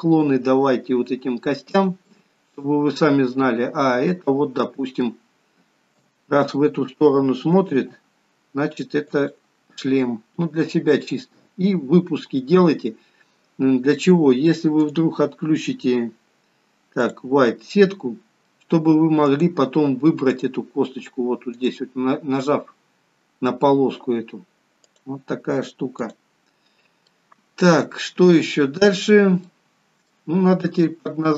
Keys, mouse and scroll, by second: 2.3 middle click, 4.9 middle click, 6.2 KP_7, 8.0 r, 10.0 middle click, 12.9 scroll up 3, 15.0 click, 18.7 middle click, 19.5 click, 20.5 click, 21.8 click, 25.1 click, 26.9-27.3 scroll down 4, 27.3 middle click, 28.5 shift+middle click, 29.3-29.7 scroll down 1, 29.7 middle click, 30.7 scroll up 2, 31.1 shift+middle click.